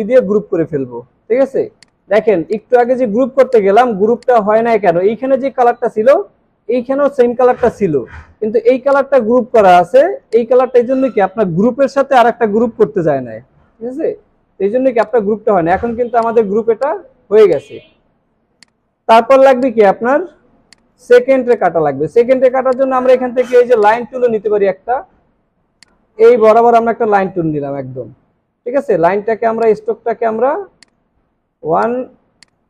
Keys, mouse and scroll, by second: 1.5 alt+scroll down 1, 2.2 alt+scroll down 3, 3.1 alt+scroll down 1, 3.5 space, 14.4 alt+scroll up 1, 15.6 alt+scroll up 3, 18.0 alt+scroll down 1, 18.5 space, 19.3 alt+scroll up 2.